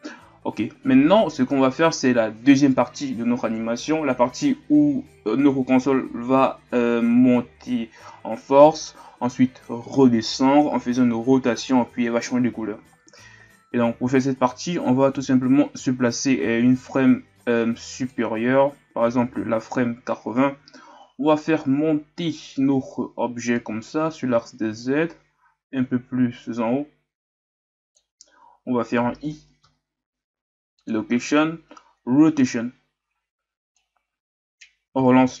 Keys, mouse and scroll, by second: 18.1-20.7 drag, 20.7-23.5 shift+scroll up 1, 23.6-35.4 drag.